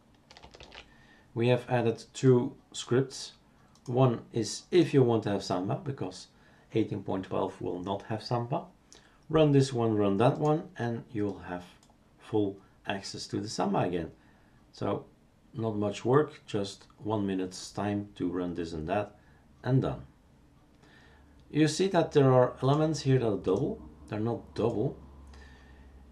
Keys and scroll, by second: 0.6 shift+super+q.